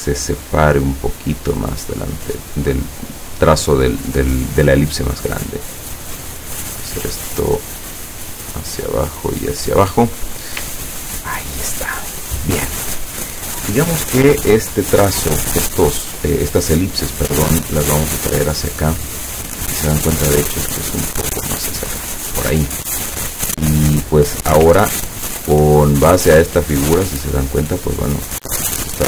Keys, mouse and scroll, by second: 4.7-6.1 drag, 6.6 click, 7.6 click, 8.2-9.4 drag, 10.9-11.4 ctrl+scroll down 2, 11.9 ctrl+click, 15.3-16.0 drag, 17.4-19.9 drag, 20.5-22.1 drag, 25.3 ctrl+scroll down 2, 28.0 click.